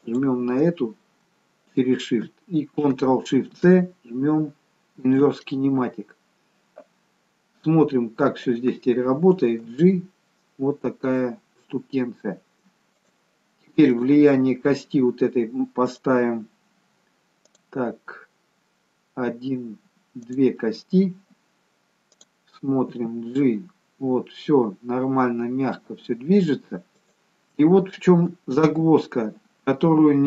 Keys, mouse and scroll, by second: 0.1 shift+click, 3.6 ctrl+shift+c, 7.3-8.3 scroll down 1, 8.6 click, 9.7 g, 13.9 click, 16.0 click, 20.4 click, 23.0 g, 28.8 ctrl+z.